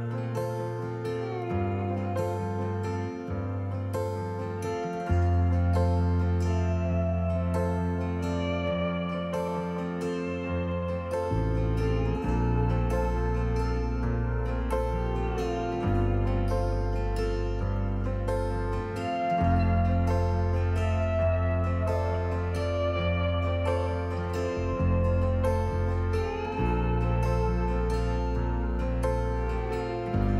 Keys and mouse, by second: 1.2 s, 1.6 x, 6.7 click, 7.7 s, 9.8 click, 11.5 KP_7, 14.2 click, 17.9 typing, 19.3 s, 19.6 x, 23.7 shift+click, 24.0 typing, 24.6-25.7 drag, 28.0-30.3 drag.